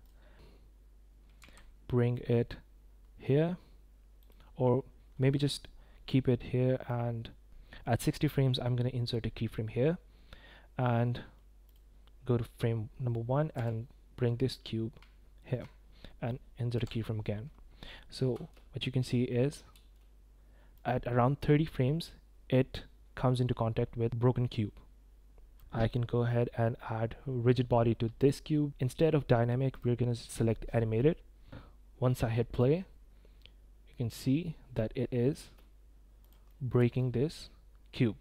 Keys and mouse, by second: 1.4 g, 6.8-8.2 drag, 10.0 i, 11.7-13.5 drag, 13.5 g, 16.7 i, 18.3 space, 19.7 space, 20.7-25.5 drag, 28.2-29.8 drag, 32.5 click, 34.7-35.2 middle drag, 35.3 space, 36.5 drag, 36.7 space.